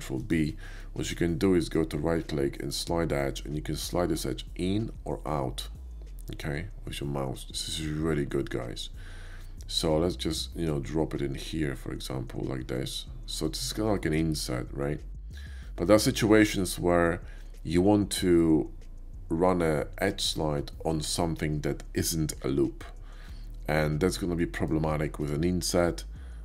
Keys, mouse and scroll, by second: 0.2 right click, 0.7 middle click, 1.5 right click, 2.7 click, 13.5 click, 13.8-15.7 middle drag, 24.4 shift+middle click.